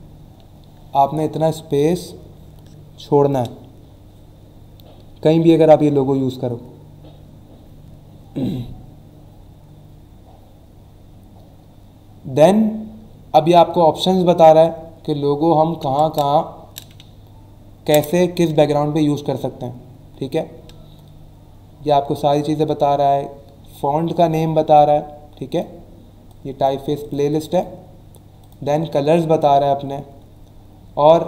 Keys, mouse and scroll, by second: 10.7 scroll down 1, 23.7 click, 25.5 click, 26.3 click, 28.4 click, 29.9-30.5 scroll down 2.